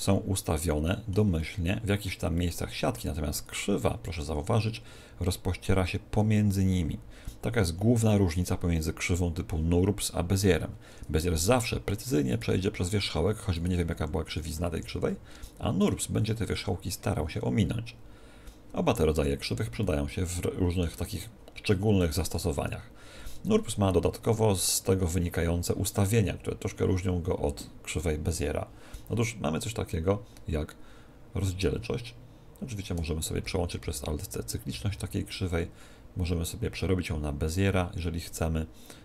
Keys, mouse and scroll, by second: 0.0-4.1 middle drag, 4.1 Tab, 6.3 Tab, 6.7 Tab, 10.9 Tab, 11.3 Tab, 11.5-15.5 right drag, 13.1 Tab, 13.9 r, 15.5 Tab, 15.8-17.7 right drag, 16.5 Tab, 19.8-23.2 middle drag, 22.3 Tab, 23.4 Tab, 33.8 alt+c, 34.7 alt+c, 37.5-39.0 drag.